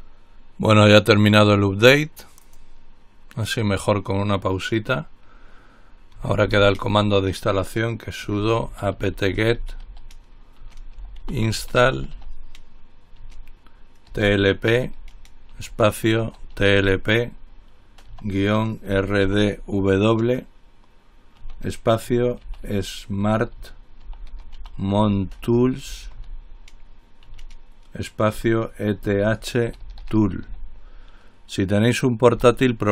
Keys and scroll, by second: 6.2-12.9 typing, 14.1-20.0 typing, 22.0-31.2 typing, 32.3-32.9 typing.